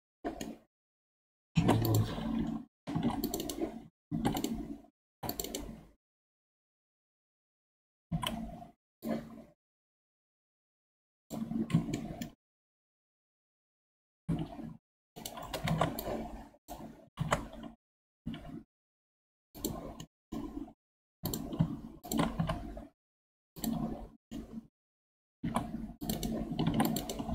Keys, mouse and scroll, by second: 0.4-1.5 middle drag, 1.5 ctrl+Tab, 2.3-2.9 scroll up 1, 2.9 ctrl+r, 4.1 ctrl+r, 5.9 scroll down 2, 6.1-8.1 middle drag, 8.1 1, 9.0 click, 11.9-14.1 shift+middle drag, 14.1 g, 15.7 alt+z, 16.0 click, 17.2 alt+z, 17.9 g, 20.0-21.1 middle drag, 21.1 2, 21.3 alt+click, 22.0 alt+shift+click, 22.4 x, 24.3-25.4 middle drag, 25.4 ctrl+r, 26.7 ctrl+r.